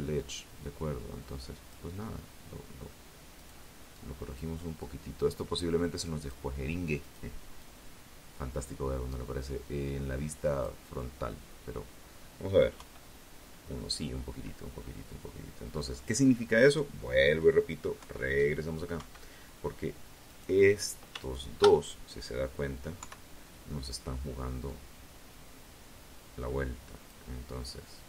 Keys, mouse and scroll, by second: 1.5 right click, 2.1 click, 2.9-4.7 drag, 5.1 right click, 5.7-9.0 drag, 9.1-10.3 scroll down 2, 10.9 KP_1, 12.5-12.9 scroll up 2, 13.8 scroll down 2, 16.1 KP_3, 17.1 KP_1, 18.4 right click, 19.4 shift+right click, 21.1 KP_3, 22.8-25.4 drag, 26.1-27.8 drag.